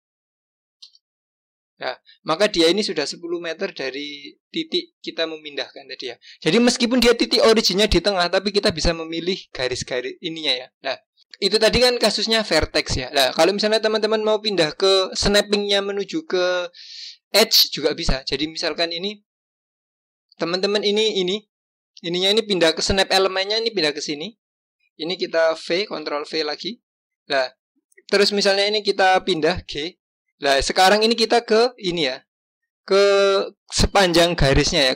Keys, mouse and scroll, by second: 1.6-3.8 scroll down 3, 22.8 click, 25.8 ctrl+v, 29.1 g, 32.1-34.9 scroll up 1.